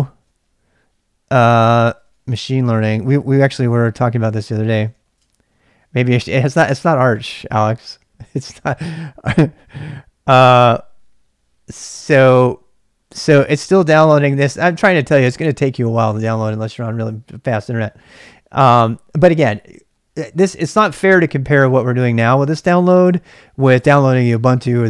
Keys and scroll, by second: 0.2 typing, 1.4-6.5 typing.